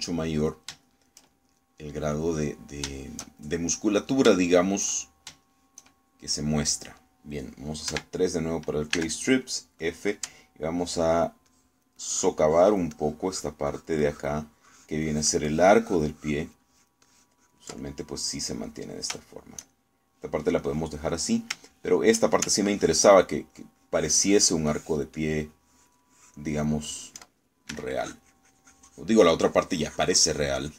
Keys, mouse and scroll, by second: 0.1-3.2 shift+middle drag, 3.3 middle click, 4.1-5.9 shift+middle drag, 6.2 shift+middle click, 8.9 3, 10.0 f, 10.9 click, 11.8 ctrl+click, 13.9-18.7 ctrl+drag, 18.9 ctrl+middle click, 19.7 middle click, 20.3-21.6 shift+middle drag, 21.7 middle click, 22.7 shift+middle click, 23.7 ctrl+click, 24.6-28.2 ctrl+drag, 28.8 s, 29.1-30.7 drag.